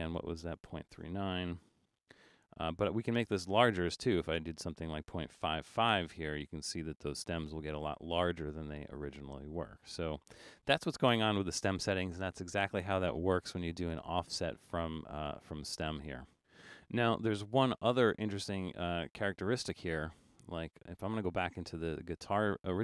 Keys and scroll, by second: 1.6-2.6 typing, 5.4 typing.